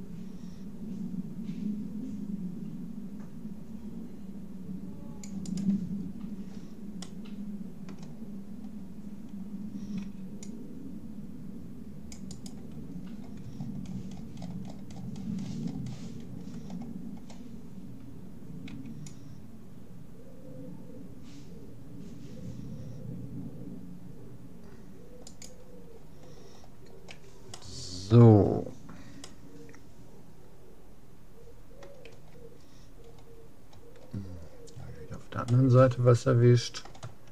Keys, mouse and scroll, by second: 5.6-7.1 right drag, 7.0-11.2 middle drag, 10.0 c, 12.9-15.6 middle drag, 16.8-18.0 scroll down 1, 18.8 c, 26.0-27.6 middle drag, 27.6 click, 28.2-31.0 middle drag, 32.2 a, 32.6-37.2 middle drag.